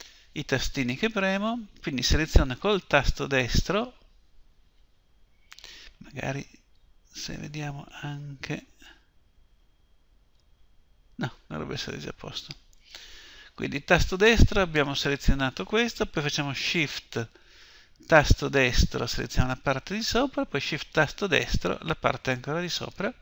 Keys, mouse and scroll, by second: 2.5 right click, 4.1 click, 7.0-10.0 drag, 14.9 right click, 16.0-16.6 drag, 21.0 right click, 21.1 click, 22.5 right click.